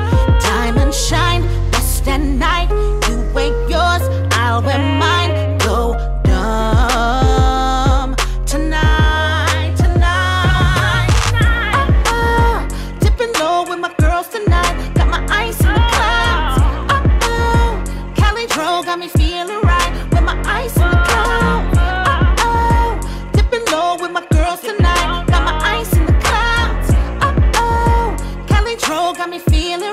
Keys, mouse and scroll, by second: 0.9-4.2 drag, 4.8-5.5 scroll down 2, 5.9 scroll up 1, 6.9 click, 8.3 shift+click, 9.0 click, 12.2 shift+click, 14.0 ctrl+v, 15.4 u, 16.2 click, 18.4 click, 20.4 -, 20.6 Return, 22.3 click, 24.0 -, 24.3 Return, 25.5 click, 27.6 Return.